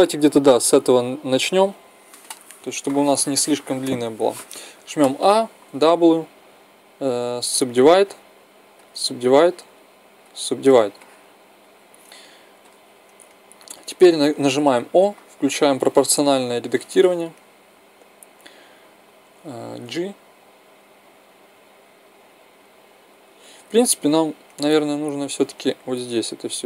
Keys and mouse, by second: 0.5 Left, 4.2 a, 4.4 a, 5.4 w, 7.8 w, 9.4 w, 10.7-12.3 drag, 12.3 middle click, 14.4 o, 19.6 g, 23.1-25.3 drag, 25.8 click.